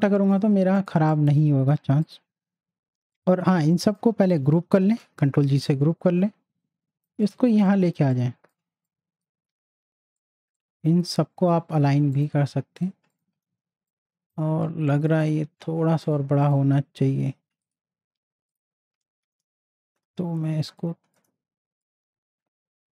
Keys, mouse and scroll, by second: 1.0 space, 1.1-4.9 drag, 4.9 ctrl+g, 5.7-7.2 drag, 7.4 z, 7.7 click, 8.0 space, 8.1 click, 8.5 space, 8.8-12.1 drag, 13.5 z, 13.9-16.0 drag, 20.8 alt+shift+click, 21.1-22.9 alt+shift+drag.